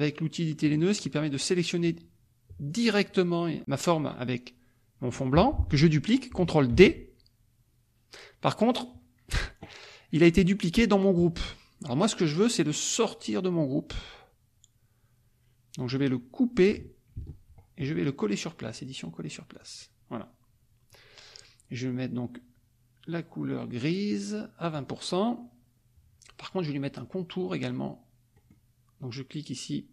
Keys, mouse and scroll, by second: 0.6 click, 1.3 click, 2.6 click, 5.3 F1, 6.7 ctrl+d, 17.1 ctrl+x, 18.6 click, 19.6 click, 24.7 click, 28.5 click.